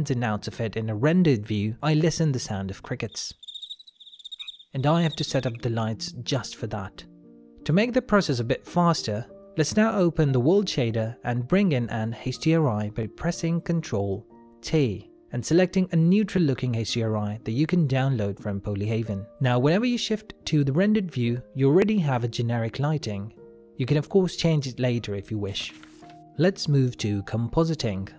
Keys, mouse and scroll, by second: 1.0 shift+middle click, 2.5 ctrl+middle click, 9.9 click, 13.2 click, 14.4 n, 14.7 click, 14.8 ctrl+t, 15.4 middle click, 16.1 ctrl+middle click, 16.8 middle click, 17.7 click.